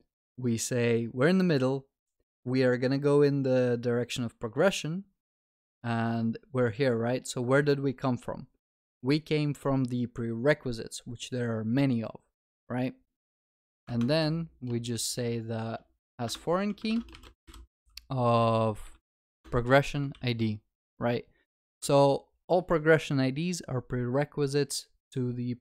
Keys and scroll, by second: 16.3 Return, 19.4 Return, 20.1 ctrl+s.